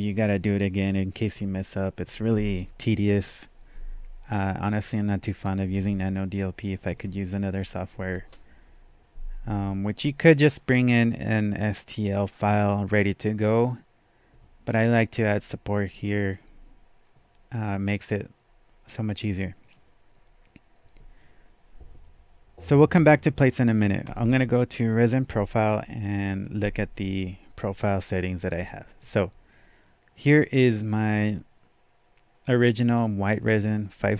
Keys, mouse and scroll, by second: 24.0 click.